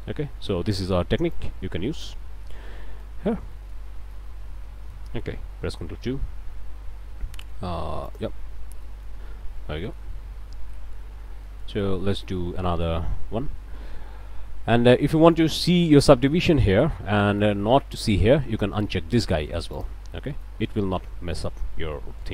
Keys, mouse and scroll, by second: 0.1 click, 1.3 click, 2.5 middle click, 3.2 scroll down 1, 3.5 click, 3.8 Tab, 4.1-5.1 drag, 5.8 ctrl+2, 8.1 click, 8.8 click, 9.6 click, 10.3 Tab, 10.7 click, 11.1 scroll up 1, 11.4 click, 11.9 a, 12.7 click, 15.5 click, 15.9 Tab, 16.2 click, 17.0 Tab, 17.3 click, 19.8 click, 20.3-20.9 scroll up 2, 20.4 click, 21.4 click, 21.9 a, 22.2 click.